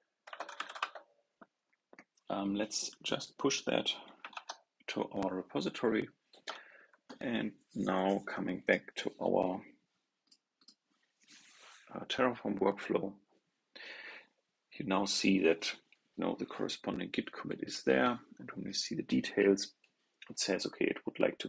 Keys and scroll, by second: 4.2 super+Tab.